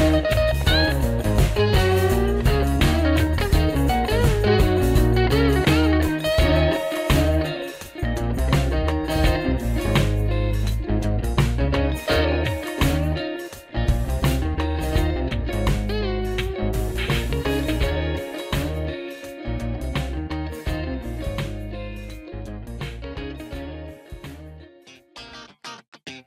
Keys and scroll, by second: 3.9-5.5 typing, 5.5 Return, 6.4 Up, 7.2 Down, 7.7 Up, 7.8 Up, 8.0 Up, 8.6-9.4 typing, 12.4-13.9 typing, 15.3 Right, 16.3 Return, 16.8-21.0 typing.